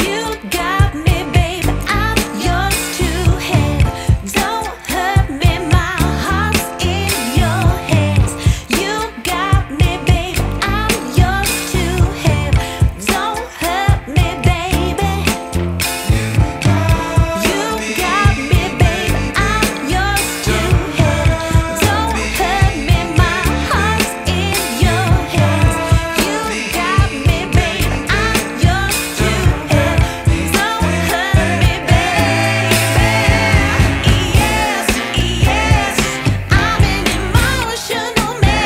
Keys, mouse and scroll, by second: 5.9 ctrl+s, 6.4-7.5 scroll up 5, 7.5-9.6 scroll up 1, 10.6 ctrl+z, 11.3-21.0 drag, 21.7-23.4 drag, 25.9-26.9 drag, 31.2-34.8 drag, 37.5-38.6 drag.